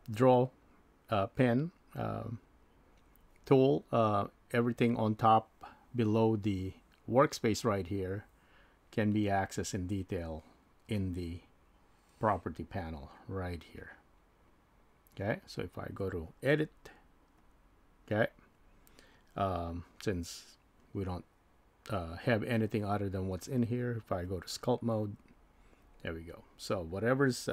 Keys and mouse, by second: 16.7 click, 24.4 click.